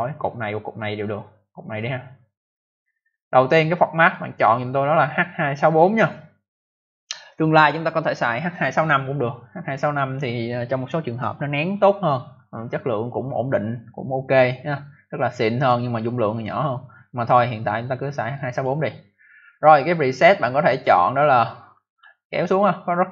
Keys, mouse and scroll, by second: 1.5 click, 1.7 click, 3.9 click, 4.0 click, 18.3 click, 20.5 click, 20.8 click, 20.8 scroll down 1, 21.9 scroll up 1, 22.4 scroll down 1.